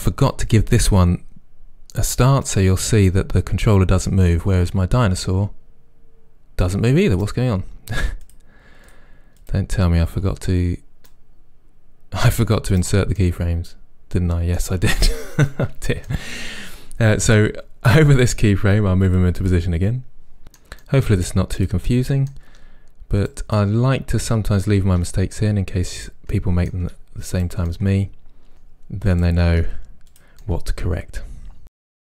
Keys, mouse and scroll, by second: 2.6-8.3 right drag, 8.3 click, 8.9 click, 11.2 right click, 13.2-19.1 middle drag, 19.1 drag, 20.5 r, 20.8 click, 20.9-21.9 middle drag, 21.9 click, 22.4 r, 23.0 click, 23.1-24.4 middle drag, 24.4 click, 24.6 middle click, 24.9 r, 25.3 click, 25.4-27.5 middle drag, 27.1 r, 27.5 click, 27.6-28.9 middle drag, 28.3 r, 28.9 click, 29.0 middle click, 29.3 r, 29.5 click, 29.7-31.2 middle drag, 31.2 click, 31.3 r, 31.7 click, 31.8-32.1 middle drag.